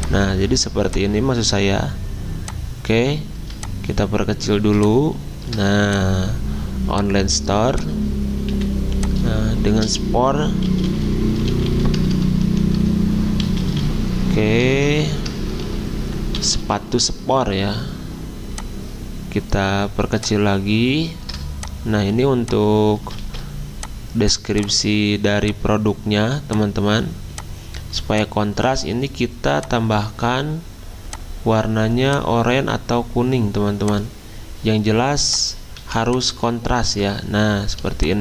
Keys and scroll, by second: 8.5 typing, 10.4-16.8 typing, 12.7 Caps_Lock, 23.2 ctrl+z, 35.8 z.